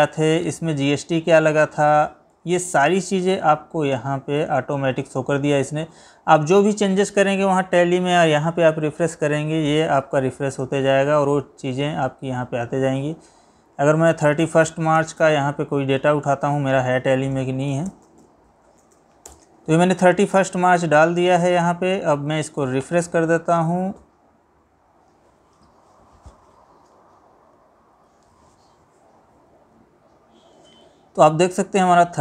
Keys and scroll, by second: 2.2 Right, 4.5 Left.